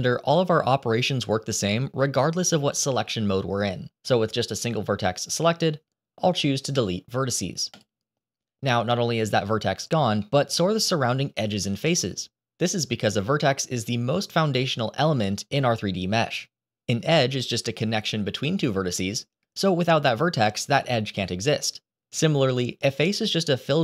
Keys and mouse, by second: 10.2 middle click.